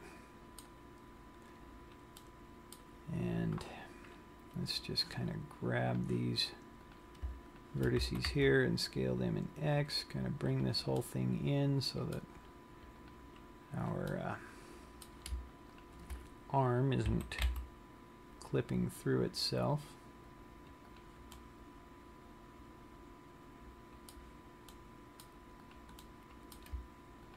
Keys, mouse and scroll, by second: 1.4-2.3 scroll up 4, 2.4 middle click, 6.0 click, 7.2 click, 7.8 shift+click, 8.3 s, 11.0 click, 11.2 middle click, 13.2 click, 14.4 middle click, 16.1 shift+click, 17.2 s, 21.3 click, 21.6 middle click, 25.1 middle click, 26.1 click, 26.3 middle click.